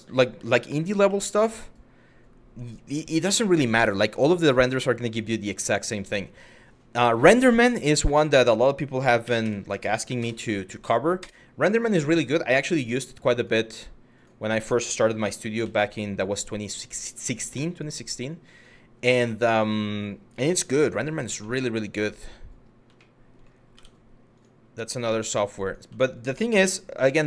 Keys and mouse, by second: 0.6 r, 8.9 s, 9.1 x, 9.8 KP_0, 10.8 Return, 12.4 click, 13.0 click, 14.8 g, 15.3 x, 16.2 click, 16.8 Tab, 17.4 click, 18.2 click, 19.0 middle click, 20.1 z, 21.1 middle click, 21.6 middle drag, 22.6-22.9 shift+middle drag, 23.4 Tab, 24.9 2, 25.8 shift+click, 26.3 f.